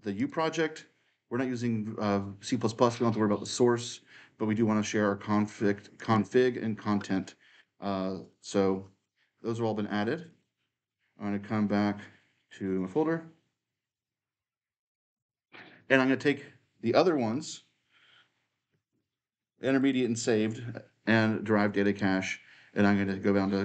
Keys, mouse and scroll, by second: 3.1 click, 5.8 click, 8.1 click, 12.2 click, 18.7 ctrl+click, 19.6 ctrl+click, 21.6 right click.